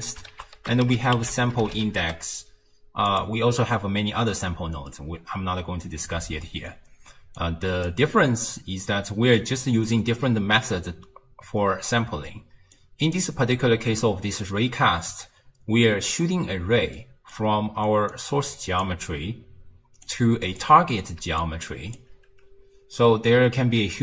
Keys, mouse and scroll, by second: 0.3 ctrl+a, 4.9-7.4 middle drag, 7.4 click, 9.4-12.4 middle drag, 12.8 click, 17.0-17.6 middle drag, 17.6-22.0 typing, 18.2-18.9 drag, 20.1-20.6 drag, 21.4-22.0 drag, 23.7 d.